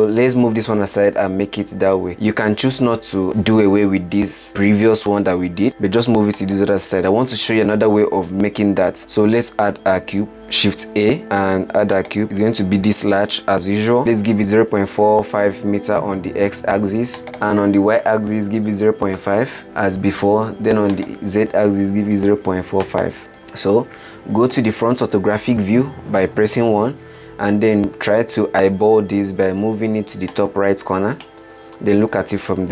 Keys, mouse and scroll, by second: 1.3 g, 9.0 shift+a, 10.3 shift+a, 13.4-14.7 drag, 17.5-20.1 drag, 21.2-23.4 drag, 23.7-24.8 scroll down 1, 24.8 KP_1, 27.3 g, 31.6-32.7 middle drag.